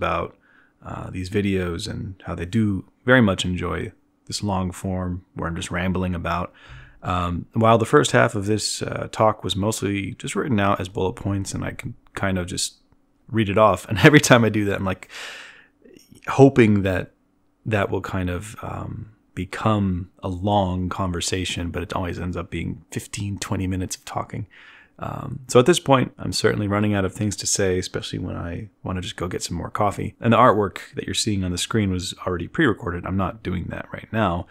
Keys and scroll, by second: 10.1 z, 24.0-24.9 typing, 28.6 z, 31.7-34.0 typing.